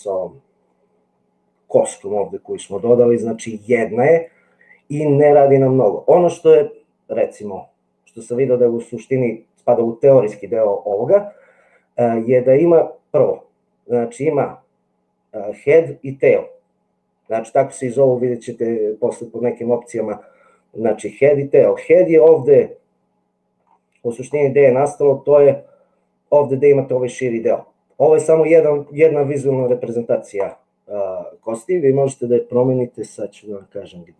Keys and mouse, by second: 1.0-2.4 middle drag, 10.6 middle click, 12.4 middle click, 27.7 middle click.